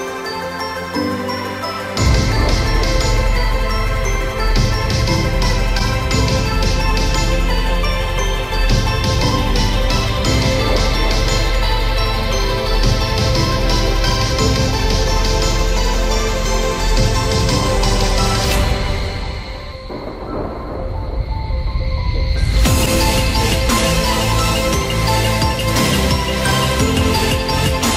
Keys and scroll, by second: 25.0 ctrl+0.